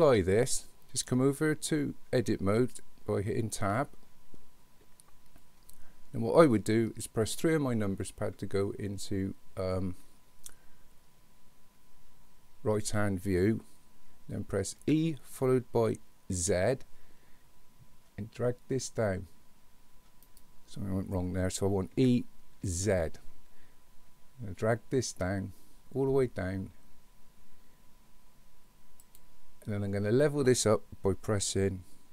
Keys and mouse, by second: 3.6 Tab, 7.3 KP_3, 14.8 e, 22.0 e.